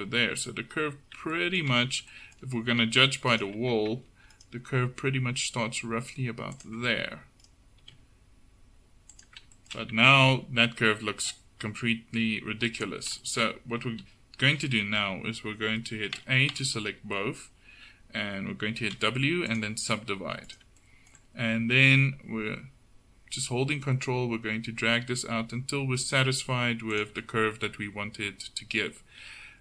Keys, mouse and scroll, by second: 3.4 click, 3.6 Tab, 4.8 g, 7.5 click, 7.9 g, 10.2 Tab, 12.7 Tab, 16.2 a, 16.6 a, 19.0 w, 20.5-22.6 drag, 21.8 g.